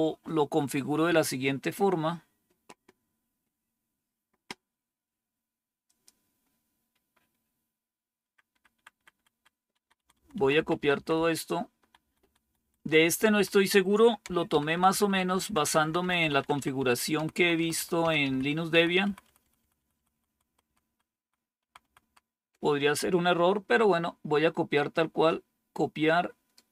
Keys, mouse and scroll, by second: 5.7 click, 8.1 Page_Up, 8.6 Up, 8.9 Up, 9.0 Up, 9.2 Up, 9.7 Left, 9.9 Left, 10.0 Left, 10.2 Left, 10.4 Left, 10.6 Left, 10.8 Left, 11.0-11.9 Left, 12.1 Left, 12.3 Left, 12.7 Left, 13.0 Left, 13.2 Left, 14.4 shift+Down, 14.6 shift+Down, 14.8 shift+Down, 15.0 shift+Down, 15.2 shift+Down, 15.4 shift+Down, 15.5 shift+Down, 15.7 shift+Down, 15.9 shift+Down, 16.1 shift+Down, 16.3 shift+Down, 16.5 shift+Down, 16.7 shift+Down, 17.0 shift+Right, 17.3 shift+Right, 17.5 shift+Right, 17.7 shift+Right, 17.9 shift+Down, 18.1 shift+Down, 18.6 shift+Right, 18.9 shift+Right, 19.1 shift+Right, 19.3 shift+Right, 19.5 shift+Right, 19.7 shift+Right, 19.8 shift+Right, 20.0 shift+Right, 20.2 shift+Right, 20.4 shift+Right, 20.5 shift+Right, 20.7 shift+Right, 21.1 shift+Right, 21.5 shift+Right, 21.7 shift+Right, 21.9 shift+Right, 24.6-26.4 right drag.